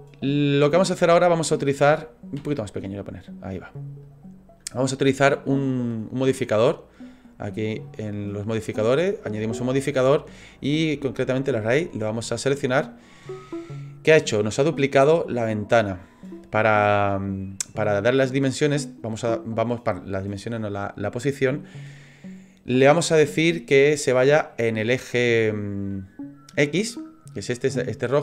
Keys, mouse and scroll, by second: 0.5-1.1 scroll down 2, 1.1 shift+middle click, 2.4 s, 4.0 click, 5.6 middle click, 7.6 click, 13.2 middle click, 25.9 middle click.